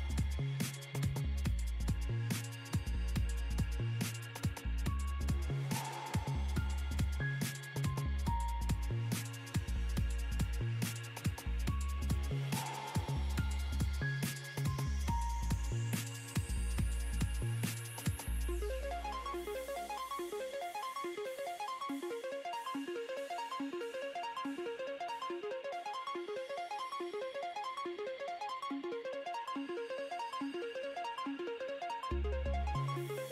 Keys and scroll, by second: 9.0 F7, 23.4 2.